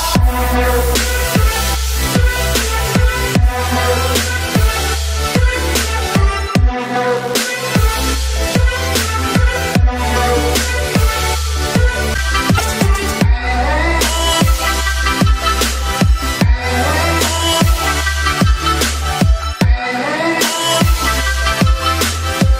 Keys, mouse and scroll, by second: 8.7 click, 10.4 ctrl+z, 12.0 click, 17.6-22.5 drag.